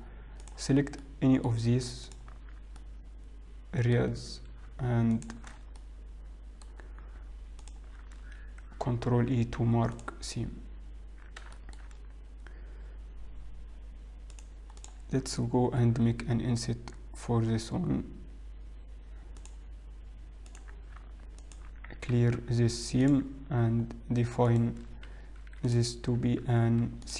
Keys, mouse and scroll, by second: 1.8 middle click, 2.2 alt+click, 2.8 middle click, 4.2-4.6 scroll up 3, 5.9 alt+shift+click, 5.9 middle click, 5.9-6.2 scroll down 3, 7.7 alt+shift+click, 9.2 ctrl+e, 11.0-11.4 scroll up 2, 11.6 shift+middle click, 12.3 scroll up 1, 14.4 click, 16.0 click, 16.0 i, 20.6 click, 21.7 alt+click, 22.2 ctrl+e, 24.6 right click.